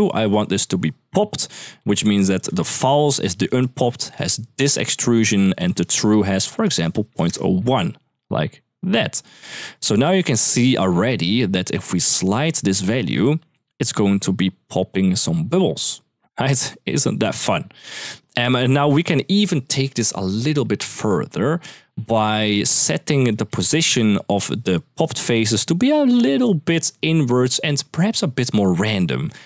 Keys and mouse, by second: 0.2 middle click, 1.6 middle click, 2.1 ctrl+click, 3.3-4.3 drag, 5.3-7.0 drag, 7.9 click, 8.1-9.3 drag, 10.5 middle click, 11.8-16.5 drag, 16.6 ctrl+z, 17.0 ctrl+s, 18.2 middle click, 18.6 middle click, 22.3 click, 23.1 click, 23.4 middle click, 23.7 g, 24.1 click.